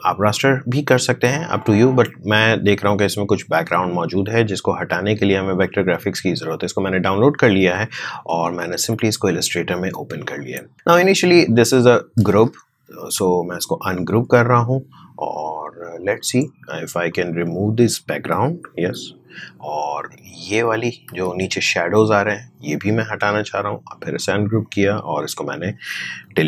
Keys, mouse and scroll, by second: 7.7 alt+Num_Lock, 7.8 alt+Tab, 10.3 click, 12.2 ctrl+z, 12.9 right click, 13.9-18.8 drag, 18.8 Delete, 19.9 click, 21.2 ctrl+z, 22.2 right click, 23.4-26.2 drag, 26.2 Delete.